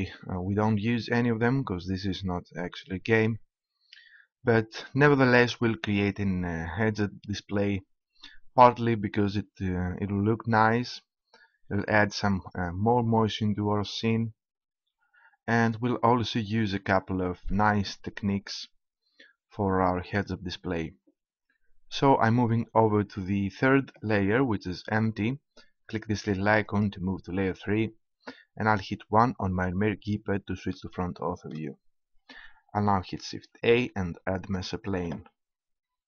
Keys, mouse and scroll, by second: 9.4-10.7 middle drag, 12.0-13.4 middle drag, 14.7-16.0 middle drag, 18.7-22.7 middle drag, 24.0-25.4 middle drag, 26.6-28.4 drag, 28.6 KP_1, 33.3 shift+a.